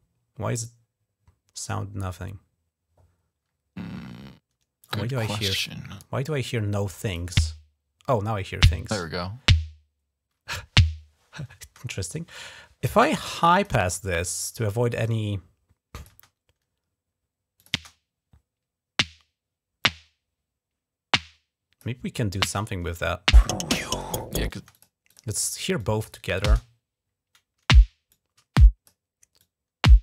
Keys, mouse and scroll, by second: 4.6 click, 5.9 scroll up 2, 6.9 click, 7.2 space, 11.5 space, 13.2 click, 14.8-15.9 drag, 15.9 space, 16.1 click, 17.4 click, 17.6 space, 19.6-21.6 drag, 22.2 click, 23.2 click, 24.3 space, 24.6 click, 24.9 click, 25.6 click, 26.3 typing, 27.9 click, 29.2-30.0 drag.